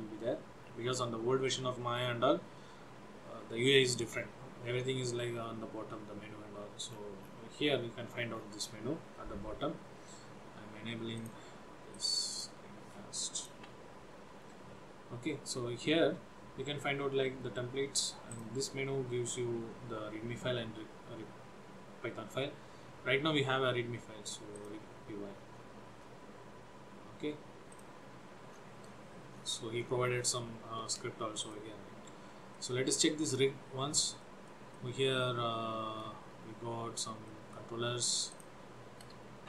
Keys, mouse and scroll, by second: 13.4 click, 13.7 n, 18.4 click, 25.6-26.5 scroll up 10, 27.8 click, 28.5-30.3 scroll up 14, 31.4 click, 32.6 middle click, 33.8-34.2 scroll up 2, 34.3 shift+middle click, 34.8 middle click, 36.5-36.9 scroll up 2, 37.4 middle click, 38.5 click.